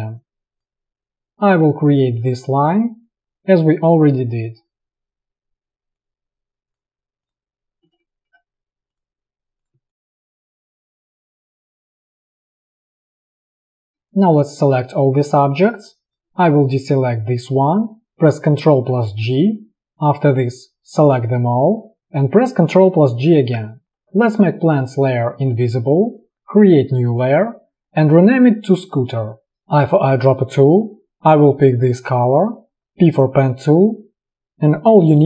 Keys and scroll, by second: 3.3 space, 10.3 space, 13.9 alt+space, 18.6 ctrl+g, 23.3 ctrl+g, 30.2 i, 32.8 p.